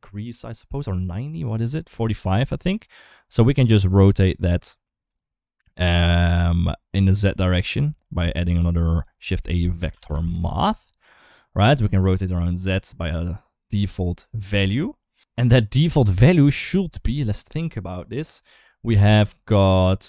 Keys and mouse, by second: 3.9 click, 4.1 click, 6.5 click, 7.4 click, 8.7 g, 9.0 shift+a, 11.9-14.0 shift+drag, 14.5 shift+middle click.